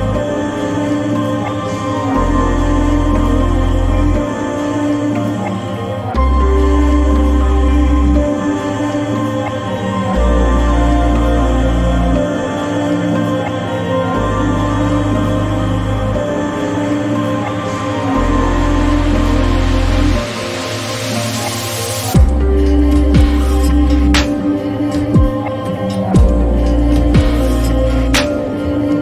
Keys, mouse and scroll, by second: 2.7 click, 5.5-16.1 drag, 19.4 click, 24.1-29.0 drag.